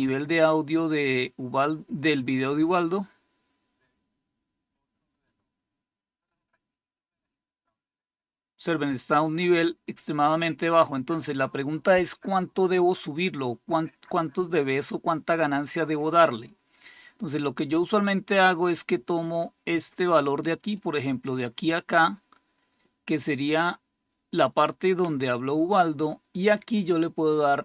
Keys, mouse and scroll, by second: 2.0 click, 16.2 click, 20.6-24.2 drag.